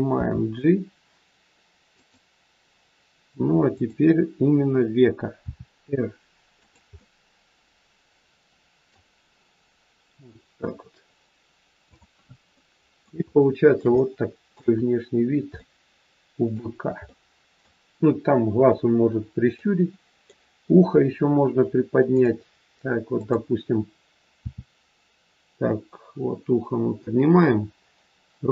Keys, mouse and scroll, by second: 0.1 g, 3.7 click, 5.3 r, 7.0 middle click, 9.4-10.0 scroll down 2, 11.8 click, 12.6 middle click, 13.2 shift+middle click, 14.0 middle click, 14.7-15.6 scroll down 3, 15.6 middle click, 17.0 middle click, 22.1 middle click, 22.1 click, 23.1 click, 24.4 r.